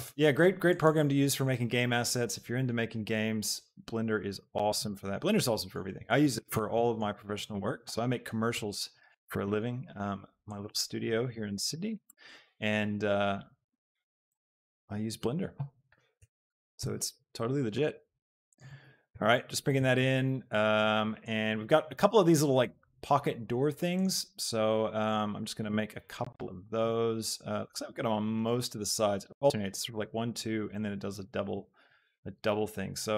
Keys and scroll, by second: 8.6 ctrl+r, 16.0 shift+e, 16.3 Escape, 16.7 s.